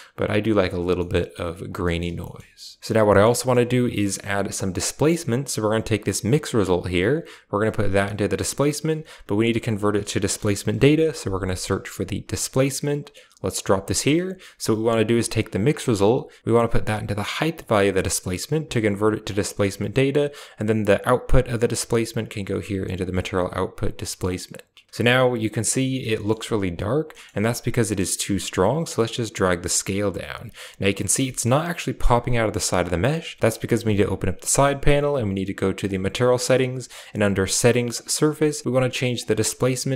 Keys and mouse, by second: 0.9 middle click, 1.4 drag, 1.7 middle drag, 2.0 a, 2.2 middle click, 3.1 middle click, 3.9 middle click, 5.5 click, 7.1-8.3 drag, 9.3 shift+a, 13.7 click, 14.7 click, 15.7 middle click, 16.5 click, 16.6-18.2 drag, 18.6 click, 19.4 middle click, 19.9 click, 21.6 click, 22.9 click, 24.0 middle click, 27.0 middle click, 28.4-30.9 shift+drag, 31.3 shift+middle click, 33.4 click, 35.8 click, 39.1-39.9 drag.